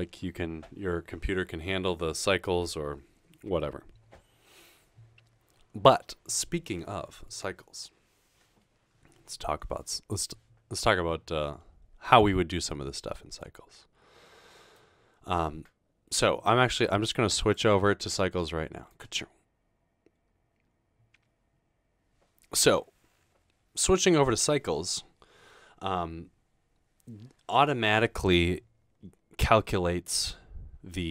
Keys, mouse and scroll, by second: 17.4 click, 18.9 click.